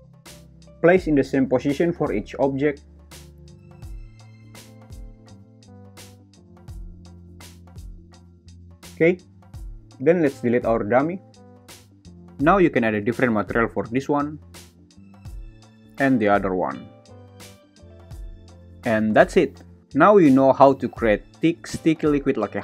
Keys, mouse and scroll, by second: 0.2-0.6 right drag, 0.9 shift+d, 1.1 r, 1.9 g, 2.1 click, 3.4 right click, 4.2 shift+d, 4.4 r, 6.1 right click, 6.6-6.9 right drag, 7.3 shift+d, 7.6 r, 8.4 g, 8.7 click.